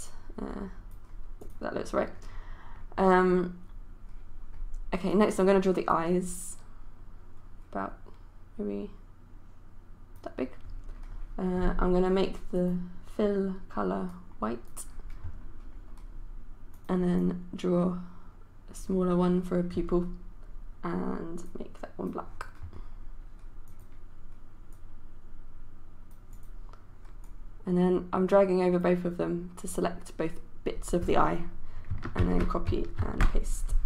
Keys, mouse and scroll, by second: 32.3 ctrl+c, 33.0 ctrl+v.